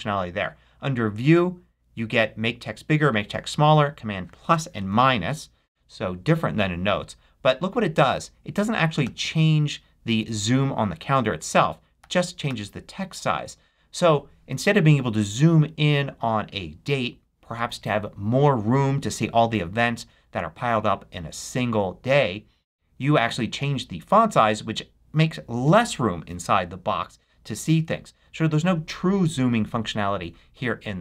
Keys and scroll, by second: 7.9 super+=, 11.9 super+-.